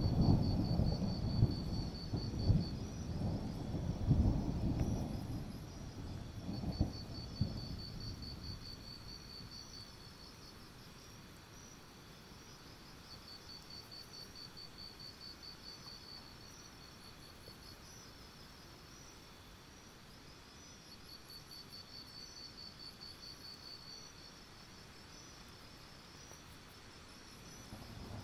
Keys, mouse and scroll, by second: 2.1 click, 2.5-3.1 alt+scroll up 1, 3.1 click, 4.0 alt+scroll up 1, 4.7 click, 5.3 alt+scroll down 1, 5.6-6.2 alt+scroll up 1, 6.2 click, 6.6 alt+scroll down 1, 6.8-7.3 scroll up 1, 7.3 click, 8.0-8.6 alt+scroll down 2, 8.6-9.1 scroll up 1, 9.1-10.5 drag, 11.1 scroll up 1, 11.3 scroll down 1, 12.0-13.8 ctrl+scroll down 1, 13.8 scroll down 1, 14.1 click, 14.3-14.8 scroll down 1, 15.6-17.8 alt+drag, 17.9 ctrl+z, 18.2 click, 19.1 alt+scroll up 1, 19.4 click, 20.0-20.8 alt+scroll down 1, 20.8 click, 21.0-25.3 alt+scroll up 1, 25.3 click, 28.1 click.